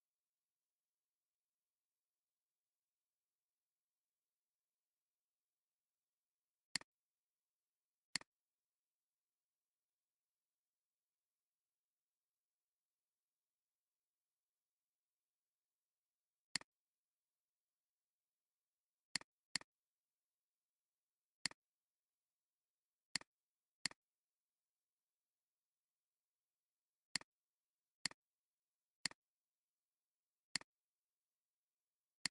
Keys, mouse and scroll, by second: 0.0-1.2 typing, 3.3-5.5 typing, 8.1 click, 19.5 double click, 27.6 alt+scroll down 1, 27.9 space, 28.5 alt+scroll up 2, 30.1 alt+scroll down 1, 30.4 alt+scroll, 30.6 alt+scroll down 1, 30.9 space.